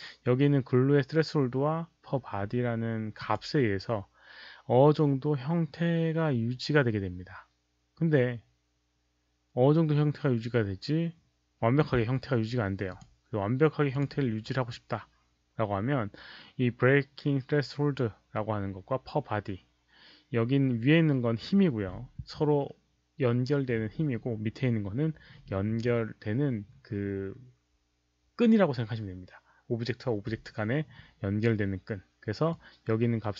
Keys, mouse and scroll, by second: 3.1 Return, 3.1 alt+click, 3.1 1, 3.2 Return, 3.2 1, 12.9 click, 13.8 click, 16.4 click, 23.6 click, 32.4-33.3 drag.